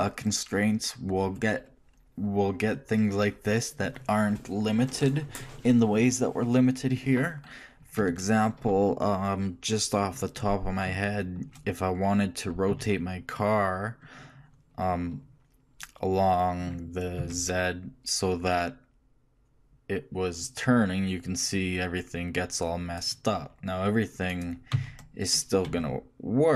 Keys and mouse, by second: 2.5-8.4 middle drag, 11.0 shift+middle click, 12.9 shift+r, 14.2 click, 16.0 click, 24.5-26.3 right drag, 24.9 r.